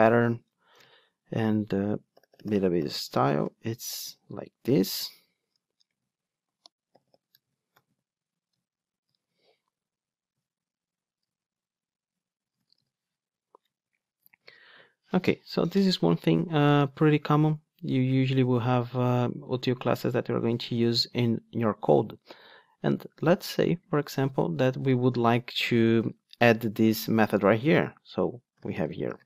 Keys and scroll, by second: 11.3 Return, 14.4 alt+super+l, 27.7 Tab.